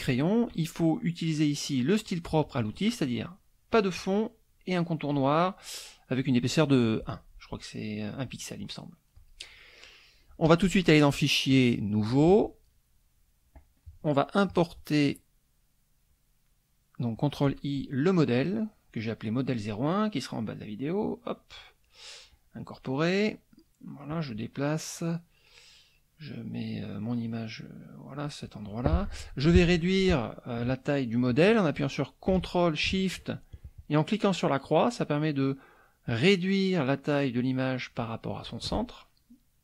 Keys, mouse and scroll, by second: 9.1 click, 11.5 click, 12.0 click, 14.5 click, 17.1 click, 20.6 click, 22.3 click, 24.2-28.4 drag, 34.3-38.6 ctrl+shift+drag.